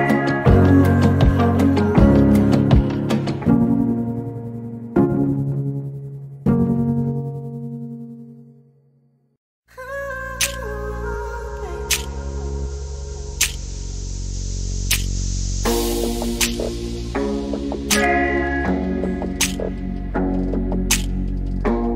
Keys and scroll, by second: 0.5-1.4 typing, 2.4 typing, 4.1-4.8 typing, 6.0 p, 8.0 space, 11.7 m, 13.0-13.9 typing, 17.7 m, 20.8 s.